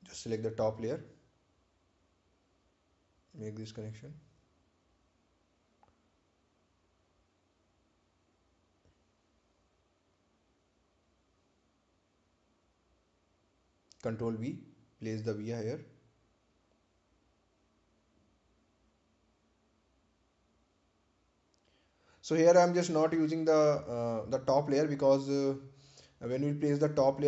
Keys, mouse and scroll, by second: 0.7 scroll down 1, 4.0 right click, 4.6 click, 9.6-11.4 scroll down 1, 18.4 right click, 19.3 ctrl+v, 21.1 click, 22.7 scroll up 1, 23.4-27.2 drag.